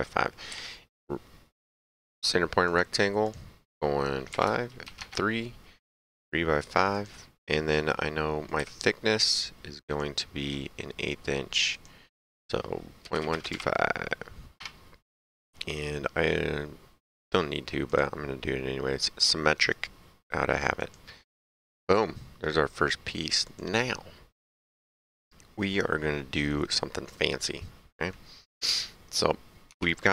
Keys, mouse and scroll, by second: 0.4 s, 1.6 click, 4.2 KP_5, 4.4 KP_Enter, 4.8 KP_3, 4.9 KP_Enter, 6.9 click, 8.1 right click, 8.5 s, 9.2 click, 11.7 click, 13.3 KP_2, 14.5 KP_Enter, 17.8 click, 19.2 right click, 20.7 click, 21.3 middle click, 23.4 click, 25.0 middle click, 27.6 middle click, 29.7 alt+Tab.